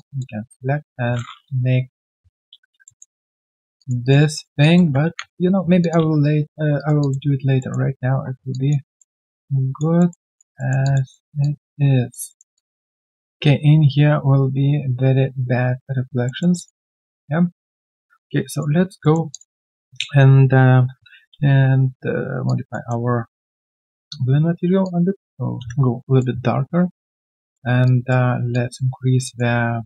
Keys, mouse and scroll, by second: 2.0 Return, 2.3-2.8 scroll down 1, 2.8 alt+middle click, 3.7 alt+click, 4.0 alt+right click, 4.3 alt+middle click, 4.6 alt+click, 5.0 ctrl+z, 5.8 alt+click, 6.2 right click, 6.2 q, 6.7 alt+right click, 7.0 alt+click, 7.6 alt+middle click, 8.9 alt+middle click, 9.1 alt+click, 10.0 alt+middle click, 10.3 alt+click, 10.5 alt+middle click, 10.8 alt+click, 11.1 alt+middle click, 11.4 alt+click, 12.2 alt+middle click, 12.5 alt+click, 16.2 alt+middle click, 16.5 alt+click, 16.8 alt+middle click, 17.2 alt+click, 18.2 right click, 18.7 scroll down 1, 19.0 alt+middle click, 22.8 right click, 29.2 alt+click.